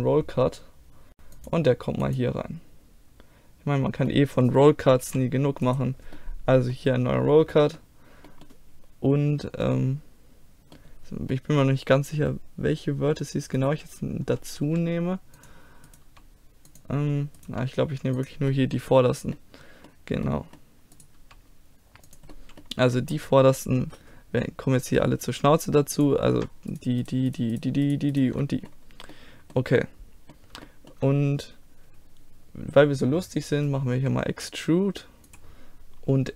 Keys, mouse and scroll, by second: 4.1 middle click, 5.0 a, 5.6 right click, 5.9-7.3 drag, 7.3-11.7 middle drag, 13.6-15.4 drag, 14.7 g, 15.9-17.1 drag, 16.0 g, 17.5 g, 18.0 click, 18.5 click, 18.6 middle click, 18.8 click, 19.2-21.0 middle drag, 21.2 g, 22.0 click, 22.5-23.5 middle drag, 25.9-29.8 drag, 26.7-27.7 right drag, 27.7-33.1 middle drag, 34.0 e, 36.1 s.